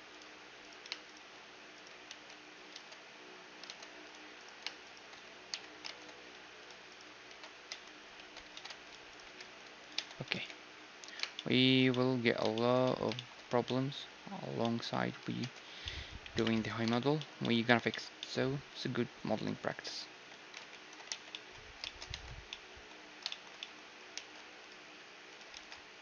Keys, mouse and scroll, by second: 0.2 ctrl+Tab, 0.6-3.7 right drag, 2.1 ctrl+x, 2.8 ctrl+Tab, 3.7 ctrl+Tab, 4.4-6.7 right drag, 5.5 j, 5.9 ctrl+Tab, 6.9-8.9 right drag, 7.3 ctrl+x, 7.7 Tab, 8.2 Tab, 8.3 click, 8.9 middle click, 9.1-10.9 right drag, 9.2 g, 10.0 Tab, 10.3 ctrl+s, 11.4 middle click, 15.4 Tab, 16.3 KP_1, 16.5 Tab, 18.8-20.1 drag, 19.7 z, 20.1 z, 20.7 ctrl+2, 21.1 t, 22.1 Tab, 22.4-26.0 middle drag, 24.1 ctrl+r.